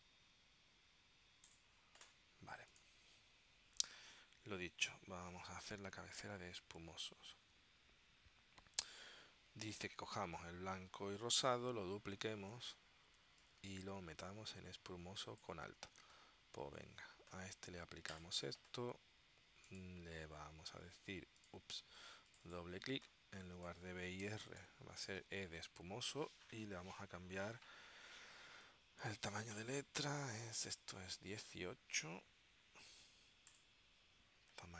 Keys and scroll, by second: 24.6 BackSpace, 25.2 shift+e.